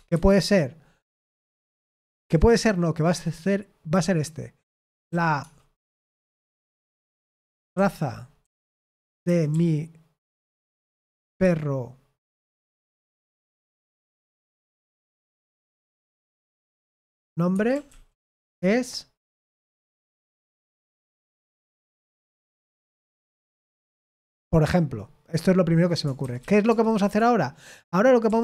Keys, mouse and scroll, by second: 0.0-2.2 typing, 4.6-23.6 typing, 26.1-28.4 typing.